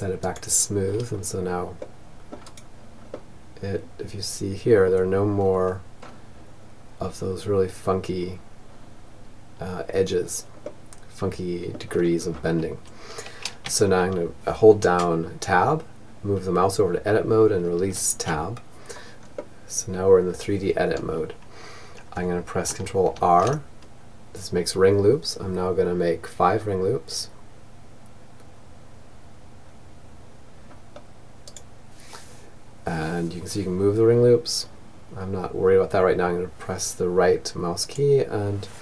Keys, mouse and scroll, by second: 0.1-2.6 middle drag, 3.7-12.5 middle drag, 12.0 Tab, 17.7-19.6 middle drag, 21.5 ctrl+r.